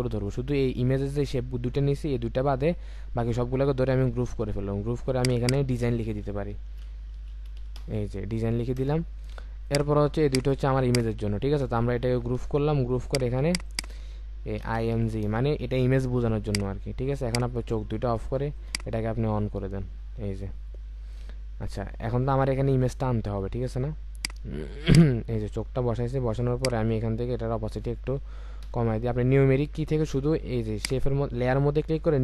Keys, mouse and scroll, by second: 4.3 ctrl+g, 5.2 double click, 6.7-7.6 typing, 8.8 Return, 10.8 shift+click, 12.4 ctrl+g, 13.5 double click, 14.6 typing, 15.2 Return, 19.8-20.8 alt+scroll up 1, 22.4-23.7 alt+scroll down 1, 28.6 5.